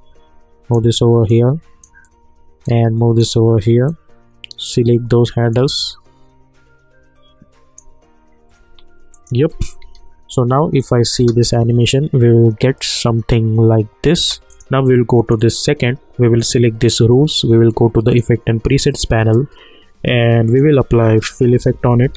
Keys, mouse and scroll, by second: 1.3-3.9 drag, 3.9-9.1 drag, 9.8 u, 10.8 click, 11.1 space, 14.1 space, 14.4 click, 20.4 click, 21.1-22.1 typing.